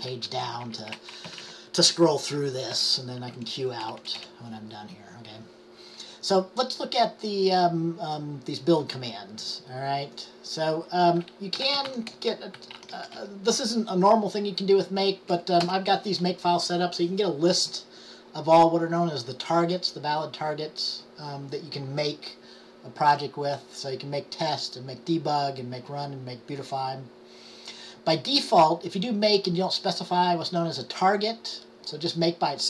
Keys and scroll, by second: 0.0-4.0 typing, 0.6 Page_Down, 11.5-13.8 typing.